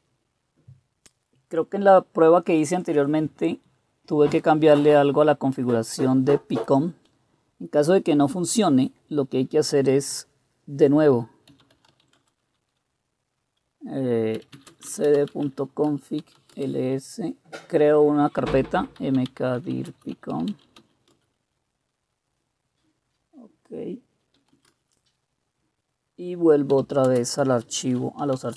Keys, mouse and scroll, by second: 11.2-12.5 typing, 14.1-21.3 typing, 24.3-25.0 typing, 26.5-28.5 typing.